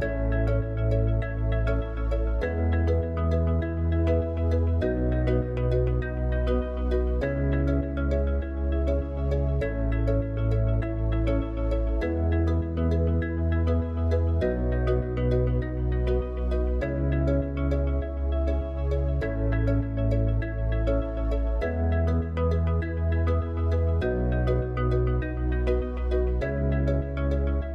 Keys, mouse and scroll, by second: 2.2-5.7 drag, 5.7 Tab, 13.7 click, 15.5 click, 21.8 click, 24.9 click.